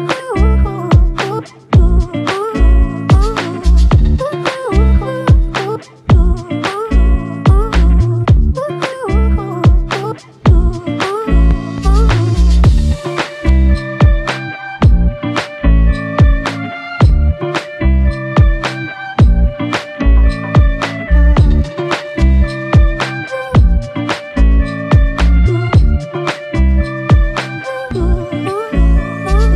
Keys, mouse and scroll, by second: 0.9 alt+shift+click, 2.2 alt+click, 3.5 ctrl+alt+click, 5.1 double click, 7.0 alt+click, 8.6 double click, 19.2 alt+click, 23.3 s, 24.6 right click, 26.0 f, 27.7 alt+click.